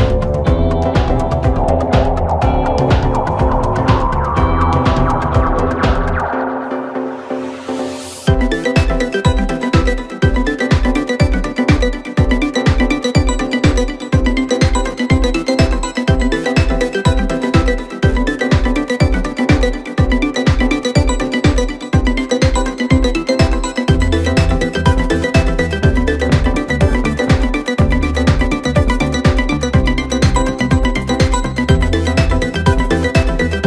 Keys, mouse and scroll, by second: 0.1 Tab, 2.6 ctrl+r, 6.3 3, 6.8 click, 7.0 click, 7.6-9.2 KP_Add, 9.5 KP_Add, 9.8 KP_Add, 10.0 KP_Add, 10.3 KP_Add, 10.7 KP_Add, 11.1 KP_Add, 11.9 x, 13.7 Tab, 14.8 ctrl+a, 16.0-16.5 scroll down 2, 18.0-18.5 drag, 18.5-19.5 scroll up 2, 19.5 click, 20.8 shift+b, 23.2 Tab, 23.9 a, 24.4-24.7 scroll up 1, 24.7 g, 28.5 scroll down 1, 28.8 Tab, 29.1-29.8 scroll down 7, 29.8-32.8 middle drag, 32.8-33.6 drag.